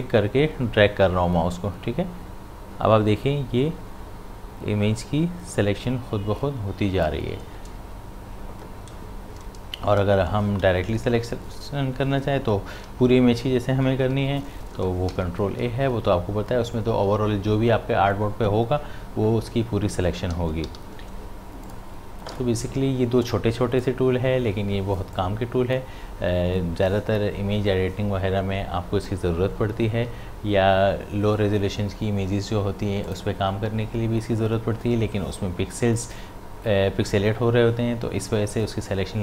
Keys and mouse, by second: 0.0-10.0 shift+drag, 14.1 ctrl+d, 15.1 ctrl+a, 19.5 ctrl+a, 20.4 ctrl+d, 20.7 v, 21.7-28.0 drag, 33.1 click.